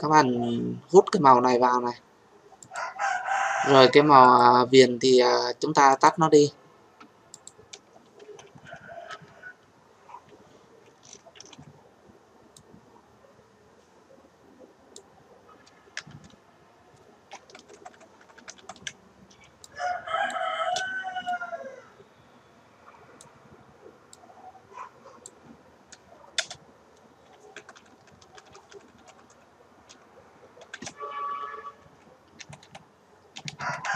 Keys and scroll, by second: 11.3 ctrl+t, 26.3 Return.